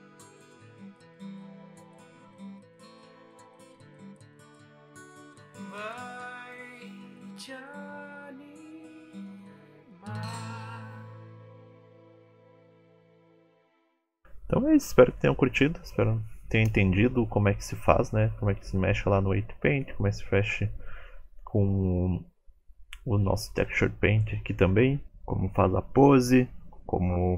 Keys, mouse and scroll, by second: 0.0 r, 1.1 shift+middle click, 2.0 click, 2.2 r, 2.6 g, 3.7 click, 3.7 g, 7.7 shift+middle click, 7.7 scroll down 5, 7.9 click, 8.1 middle click, 8.2 shift+middle click, 8.5 middle click, 8.8-12.6 typing, 10.0 middle click, 10.6 middle click, 11.3 middle click, 12.6 shift+middle click, 12.9 middle click, 13.2 middle click, 13.3 shift+middle click, 13.7 r, 14.3 middle click, 14.6 middle click, 15.0 g, 15.6-16.0 scroll down 7, 15.8 shift+middle click, 16.0 click, 16.3 middle click, 16.9 r, 17.6 middle click.